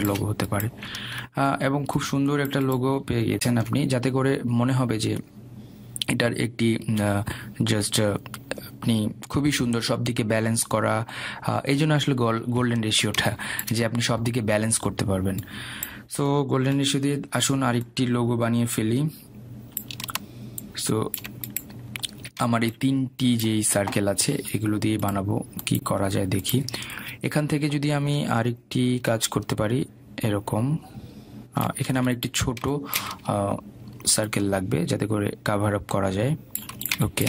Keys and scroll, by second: 18.1 Delete, 33.3 ctrl+z.